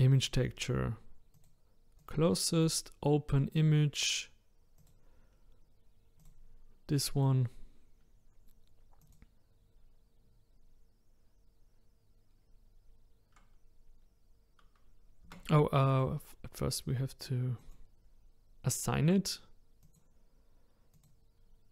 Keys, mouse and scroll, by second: 0.0 click, 2.1-7.4 drag, 9.0 click, 15.3 Tab, 16.0 click, 17.7 click, 19.8 click, 21.0 click.